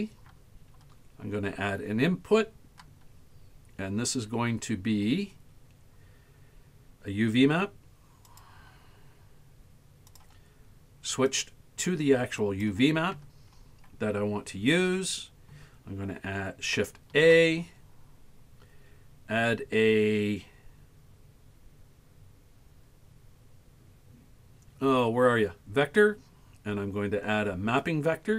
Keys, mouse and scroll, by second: 11.3-12.7 drag, 17.2 shift+a.